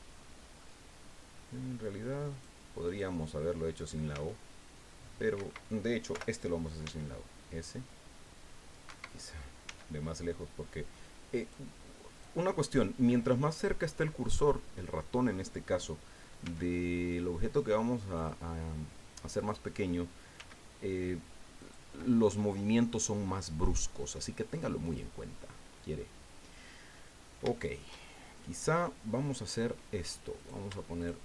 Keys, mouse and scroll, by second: 2.9 click, 3.8 right click, 4.1 s, 5.4 Escape, 6.1 o, 6.8 s, 8.9 Escape, 9.6 s, 11.4 click, 12.1 right click, 16.4 s, 18.1 click, 19.4 right click, 20.3 s, 21.6 click, 23.7-24.0 scroll down 2, 24.1-27.1 drag, 27.1 middle click, 27.2-27.5 scroll up 3, 27.5 shift+middle click, 28.3 middle click, 29.1 middle click, 30.4 right click, 31.0 shift+right click.